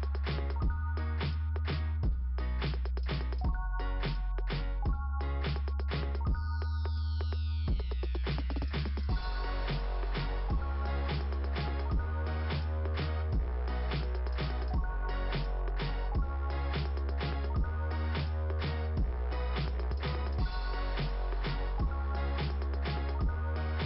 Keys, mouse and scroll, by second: 1.4 click, 2.5 click, 14.1 click, 15.8 click, 19.2 click, 19.4 click, 19.8 click, 21.2-22.3 typing, 22.9 Return.